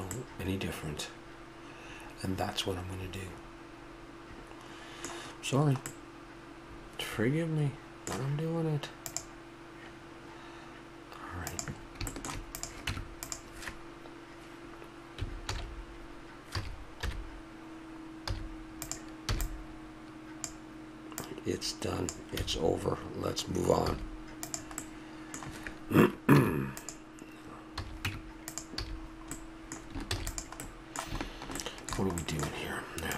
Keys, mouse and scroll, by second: 2.1-2.6 middle drag, 2.8 middle drag, 3.3 middle click, 6.0-7.9 middle drag, 12.1-12.6 middle drag, 12.6-14.4 right drag, 12.9 Tab, 15.5 alt+h, 16.5 a, 17.1 KP_1, 18.3 z, 19.3 b, 21.2-22.9 drag, 22.4 a, 23.9 z, 24.8-26.8 middle drag, 26.4 Tab, 27.8 a, 28.0 Tab, 28.8 a, 29.1 middle click, 30.1 ctrl+s.